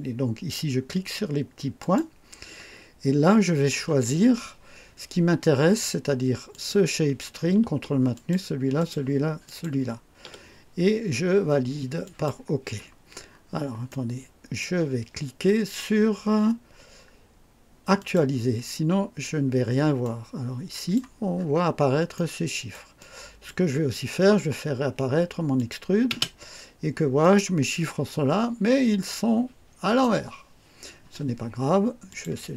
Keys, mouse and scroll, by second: 1.8 click, 6.5 click, 8.1 ctrl+click, 8.8 ctrl+click, 9.4 ctrl+click, 12.0 click, 13.3-13.6 scroll down 2, 13.9 right click, 18.0 click, 20.0 click, 21.3-21.7 scroll up 2, 22.1 right click, 23.0 click, 25.6 click, 26.1 space, 27.2 click, 27.9-30.2 drag, 32.1 click.